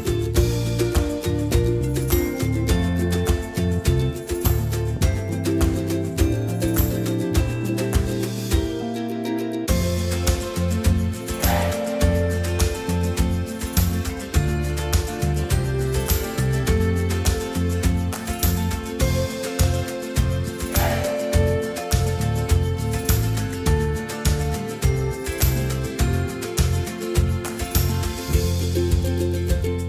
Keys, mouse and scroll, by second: 1.1-4.4 middle drag, 4.7-6.6 middle drag, 6.6 ctrl+e, 11.8-14.4 middle drag, 13.9 a, 14.4 a, 17.4-25.8 middle drag, 20.8 a, 25.8 Tab, 26.2 Tab, 26.5 a, 27.0 middle click, 27.4 middle click.